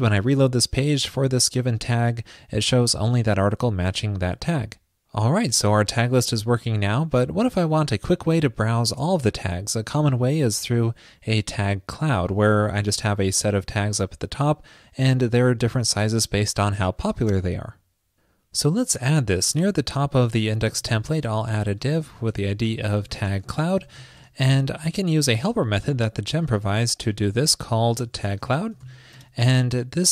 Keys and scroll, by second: 20.8 super+Return, 21.5 ctrl+shift+<, 27.1 ctrl+shift+>.